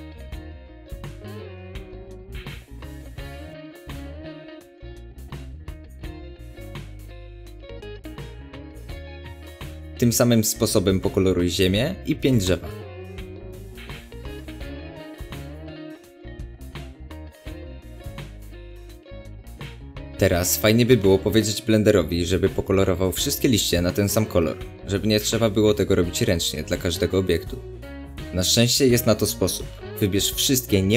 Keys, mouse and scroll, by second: 9.2 scroll down 1, 10.3-12.3 middle drag, 12.3 click, 13.1 click, 13.3 click, 13.8 Return, 17.3 click, 17.7 click, 17.9-18.7 drag, 18.3 Return, 27.3-30.6 middle drag, 30.6 click.